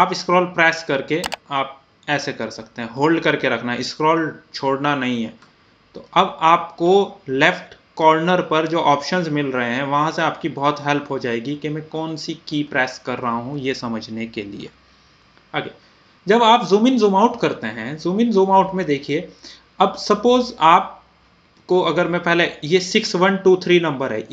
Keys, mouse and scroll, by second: 0.7-10.0 middle drag, 10.0 scroll up 1, 11.0-11.8 scroll down 1, 12.1 scroll up 1, 12.9-13.7 scroll down 1, 13.9 scroll up 1, 14.7 scroll down 1, 16.1 scroll up 1, 16.7 scroll down 1, 18.8 scroll up 1, 19.2 typing, 22.0 scroll up 1, 22.0 typing.